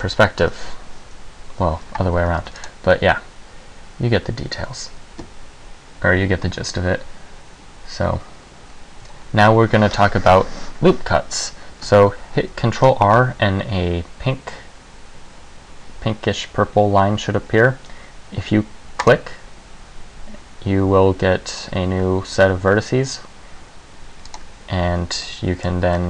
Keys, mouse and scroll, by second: 0.0 KP_5, 2.5 ctrl+s, 12.8 ctrl+r, 24.5 click, 25.4 middle click.